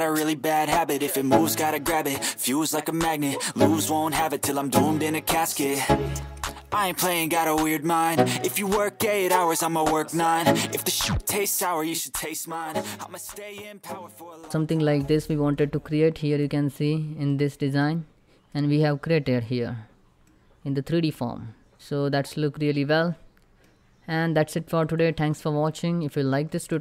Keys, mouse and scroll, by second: 0.0 1, 0.1-1.7 drag, 1.7 Tab, 1.9 click, 2.8 right click, 3.0 click, 3.1 scroll up 1, 3.7 middle click, 4.1 click, 4.5 Tab, 4.6 3, 4.7 click, 5.1 i, 5.4 shift+click, 5.5 middle click, 5.9 alt+click, 6.2 i, 6.4 shift+click, 6.5 shift+middle click, 6.6 scroll up 1, 6.8 /, 6.9 middle click, 7.2 click, 7.5 ctrl+z, 7.6 click, 7.8 i, 8.4 shift+click, 8.5 middle click, 9.1 ctrl+r, 9.4 click, 9.5 right click, 9.6 middle click, 10.1 ctrl+r, 10.2 ctrl+click, 10.3 ctrl+right click, 10.4 ctrl+r, 10.5 ctrl+scroll up 2, 10.8 click, 10.8 Tab, 10.9 click, 11.0 right click, 11.2 Tab, 11.3 click, 11.5 /, 11.6 click, 12.1 scroll down 1, 12.2 middle click, 12.3-12.7 scroll up 2, 12.5 middle click, 12.9 click, 14.2 scroll down 1, 14.5 middle click, 15.3 click, 16.4 scroll up 1, 16.9 middle click, 18.5 scroll up 1, 19.9-24.5 middle drag, 24.5 click, 25.0 scroll down 1, 25.3 shift+middle click, 25.8 scroll up 1, 26.3-26.8 shift+middle drag.